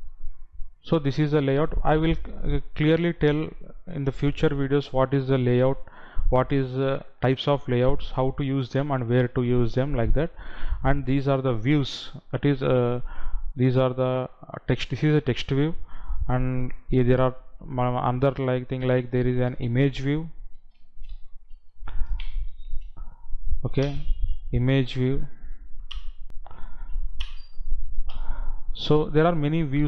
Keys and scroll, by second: 23.9 Down, 26.1 Down, 27.4 Down.